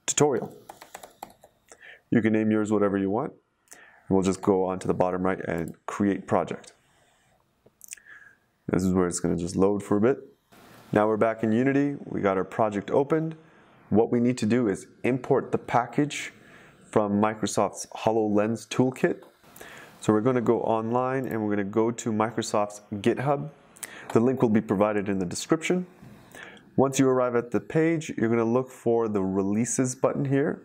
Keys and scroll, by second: 0.5-1.9 typing.